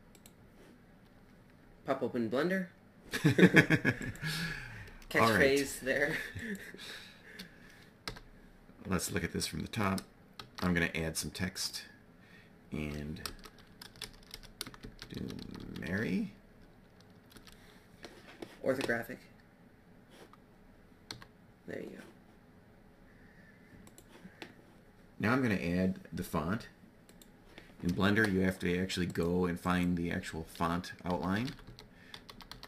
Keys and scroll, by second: 5.4 x, 8.0 7, 10.3 shift+a, 13.2 Tab, 13.7-15.8 typing, 17.3 Tab, 21.1 5, 30.6-32.5 typing.